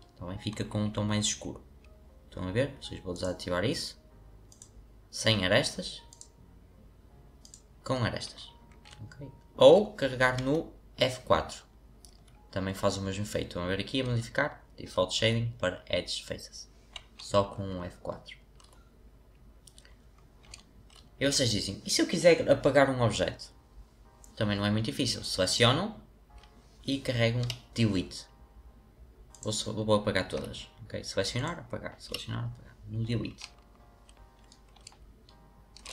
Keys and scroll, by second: 10.3 F4, 12.0 F4, 14.0 F4, 27.4 Delete, 30.3 Delete, 32.0 Delete.